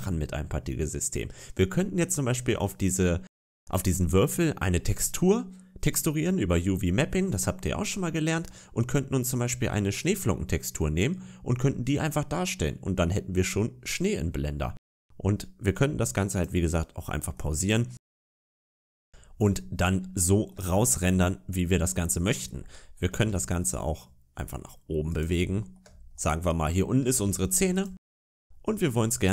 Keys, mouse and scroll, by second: 16.2 click, 16.9-17.2 scroll down 3, 17.2 middle click, 18.0 scroll up 5, 18.5 shift+middle click, 19.3 scroll down 2, 20.1 shift+middle click, 20.6 scroll up 1, 21.4 scroll down 3, 21.8 middle click, 22.9 g, 25.3 shift+middle click, 25.8 scroll up 1, 26.0 middle click, 27.0 g, 27.9 a, 28.1 a, 29.0 click.